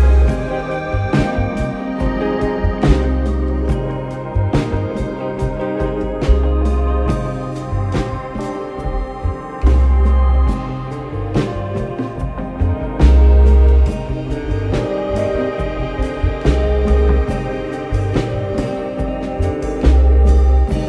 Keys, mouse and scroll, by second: 0.5 click, 1.6 click, 2.3 click, 3.3 click, 3.7 b, 6.0 click, 8.5 scroll up 1, 9.7 click, 11.3 scroll down 1, 12.1 KP_1, 13.1 ctrl+KP_1, 16.0 Tab, 16.7 click, 18.6 g.